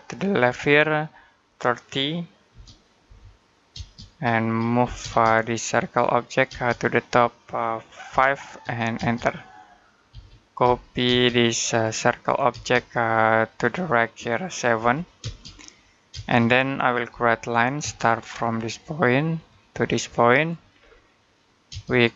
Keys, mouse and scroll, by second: 2.9 0, 3.6 space, 4.6 m, 4.8 space, 5.4 click, 6.3 space, 6.5 click, 7.9 5, 8.8 space, 9.9-10.9 typing, 12.3 space, 12.6 click, 14.6 7, 15.0 space, 16.9 l, 17.6 space, 18.0-19.2 scroll up 1, 19.2 click, 20.6-21.0 scroll down 1, 21.0 middle click, 21.5 space.